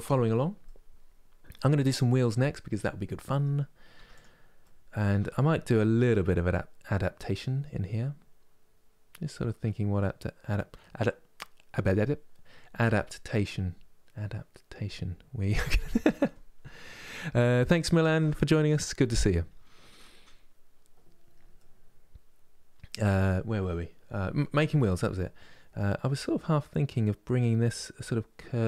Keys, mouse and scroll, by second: 3.7 Tab, 3.8 click, 4.3 middle click, 4.8 Tab, 5.0-28.6 middle drag.